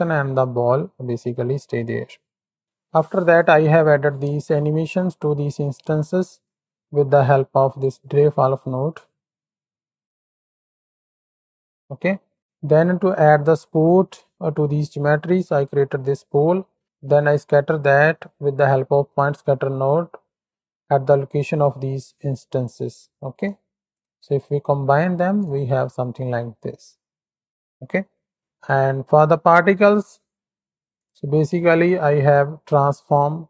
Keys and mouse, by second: 2.1 click, 4.2 space, 8.6-11.7 middle drag, 12.1 middle drag, 12.1 space, 12.3 x, 12.6 shift+middle click, 13.3 middle click, 15.5 ctrl+shift+click, 20.9 middle click, 23.2 middle click, 23.9 ctrl+shift+click, 24.8 middle click, 25.7 ctrl+shift+click, 26.6-27.6 drag, 28.1 middle click, 28.7 ctrl+space, 28.9 middle click, 28.9 click, 30.9 ctrl+shift+click, 31.5 ctrl+space, 32.2 click, 33.0 click.